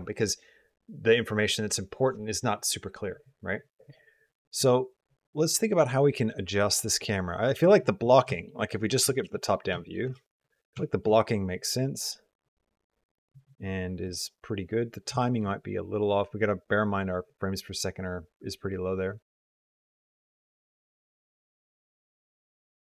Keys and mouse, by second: 3.7 click, 4.3-7.4 drag, 8.2 shift+middle click, 8.4 middle click, 8.9 shift+middle click, 9.2 middle click, 9.6 shift+middle drag, 9.9 space, 10.1 middle click, 10.7 shift+middle click, 14.0 click, 15.0 shift+middle click, 20.2 click, 21.3 click.